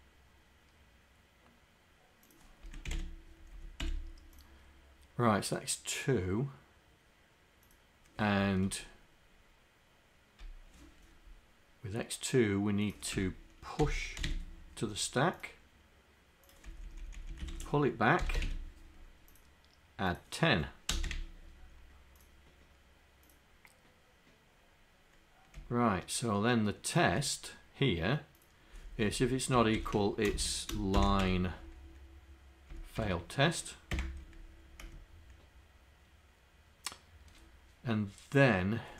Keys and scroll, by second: 30.4 ,.